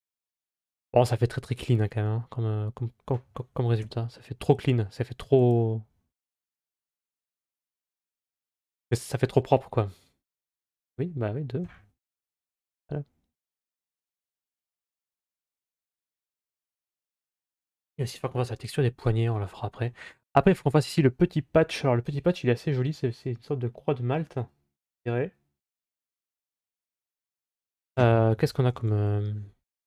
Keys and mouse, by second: 3.7 z, 13.8-14.8 middle drag, 15.0 ctrl+s, 19.2-19.5 middle drag.